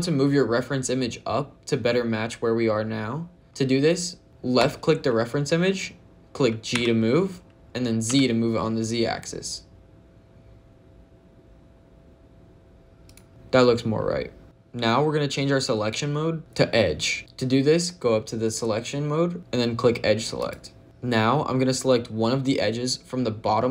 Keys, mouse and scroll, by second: 4.2 click, 4.4 click, 6.6 g, 7.9 z, 12.9 click, 20.2 click.